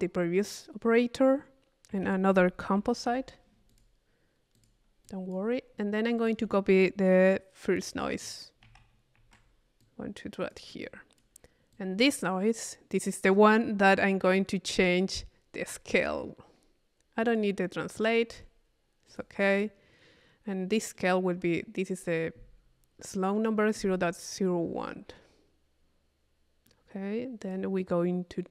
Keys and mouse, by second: 1.9 Tab, 2.3 c, 3.7 click, 4.6 click, 5.0 click, 6.2 click, 7.8 click, 8.6 c, 9.8-11.5 drag, 11.7-13.1 drag, 17.3 click, 17.9 click, 19.1 click, 21.0-26.9 middle drag, 27.4 click.